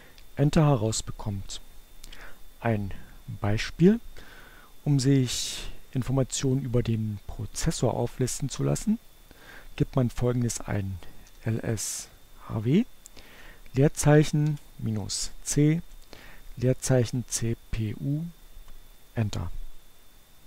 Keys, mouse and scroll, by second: 9.4-11.1 typing, 12.1 space, 12.4 -, 13.9-15.7 typing, 17.1 Return.